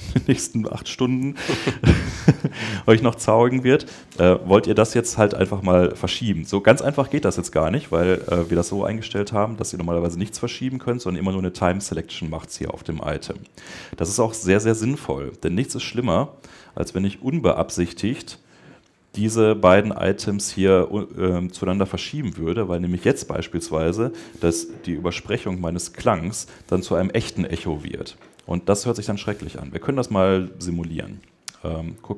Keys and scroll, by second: 17.1 Escape.